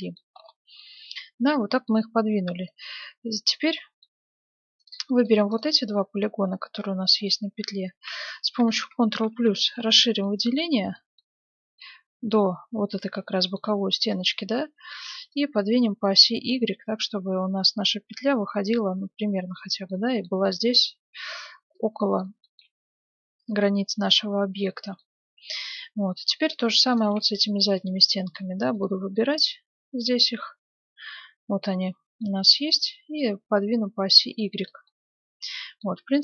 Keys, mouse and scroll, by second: 2.7-4.3 right drag, 3.5-5.4 middle drag, 4.5 ctrl+Tab, 5.2-7.3 right drag, 5.9-7.9 middle drag, 10.2-15.7 middle drag, 15.3-17.0 drag, 19.9-27.4 middle drag, 21.7-23.4 drag, 26.5-30.0 right drag, 29.5 middle click, 31.8-33.3 middle drag, 32.7-34.6 drag, 34.8-36.2 middle drag.